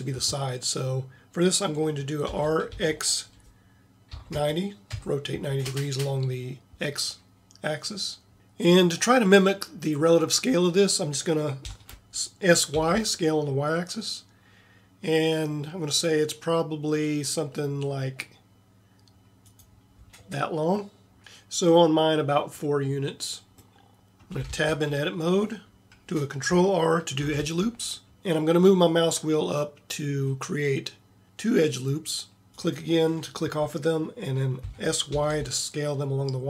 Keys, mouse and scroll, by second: 2.3 r, 11.6 s, 23.8 middle click, 23.9 click, 24.6 Tab, 27.3 ctrl+r, 34.7 s.